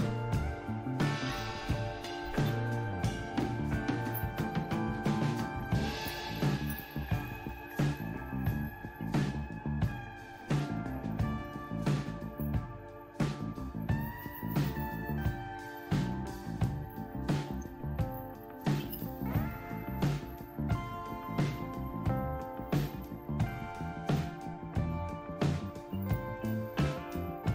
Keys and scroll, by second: 3.3-5.1 typing, 6.0 Return, 6.7 Return, 7.8 Down, 8.0 Down, 8.1 Down, 8.3 Down, 8.5 Down, 8.9 Up, 9.1 Up, 9.2 Up, 9.4 Up, 9.8 Up, 17.3 ctrl+o, 18.9 Return, 20.6 ctrl+x, 25.9 Return.